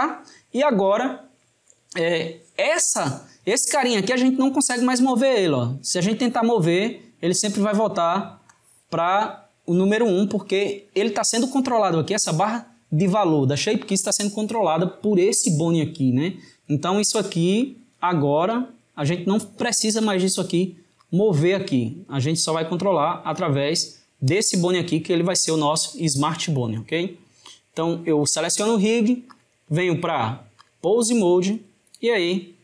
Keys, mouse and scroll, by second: 4.2-12.9 drag, 17.7-24.1 drag, 24.4 click, 29.4-32.4 drag.